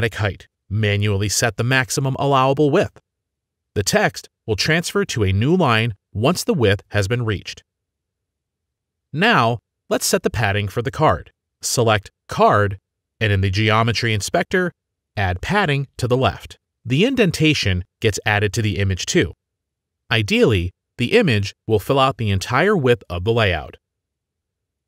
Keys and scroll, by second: 5.3 ctrl+v, 7.4 ctrl+z, 8.9 ctrl+v.